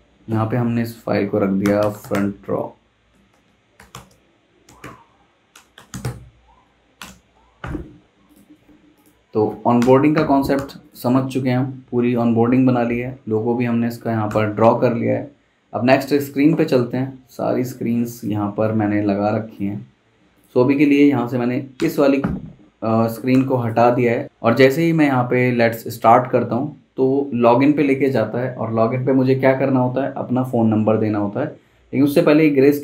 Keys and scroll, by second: 1.3-6.5 typing, 7.0 Return, 9.8 BackSpace, 10.5 v, 14.3 v, 21.7 BackSpace, 23.3 v.